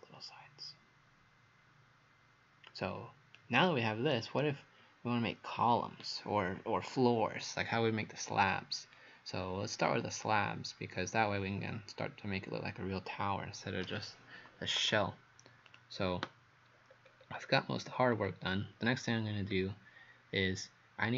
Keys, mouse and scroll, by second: 4.1 right click, 15.7 click, 17.0-17.6 scroll down 5, 18.0 scroll down 3, 19.5 scroll up 1.